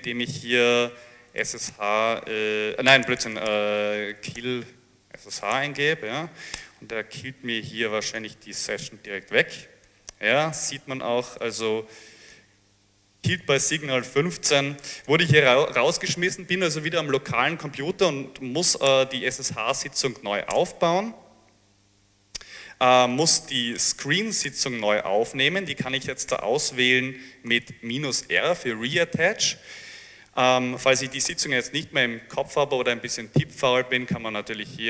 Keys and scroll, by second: 0.7-6.0 typing, 6.6 Return, 18.3-19.4 typing, 20.6 Return, 23.1-24.7 typing, 25.9-28.2 typing, 31.4 space.